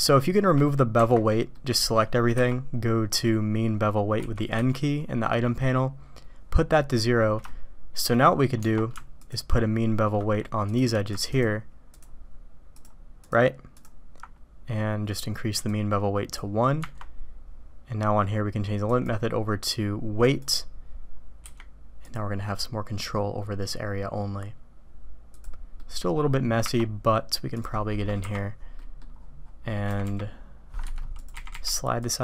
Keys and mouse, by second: 1.5 click, 2.3 n, 6.7 drag, 7.4-8.0 shift+drag, 9.2 alt+click, 11.2 ctrl+click, 11.9 ctrl+click, 12.7 ctrl+click, 13.2 ctrl+click, 13.7 ctrl+click, 15.6 click, 18.9-20.4 drag, 25.8 middle click, 27.5 click, 28.1 KP_Decimal, 28.7 drag, 29.8 g, 31.1 click.